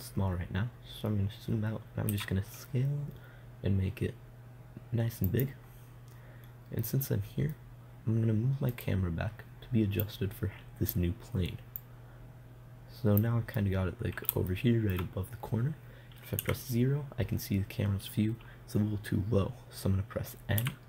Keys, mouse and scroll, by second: 1.5-3.4 middle drag, 2.5 s, 5.9-7.3 drag, 7.3 middle click, 9.2-10.5 right drag, 10.9-14.1 drag, 14.1 middle click, 16.8 KP_0.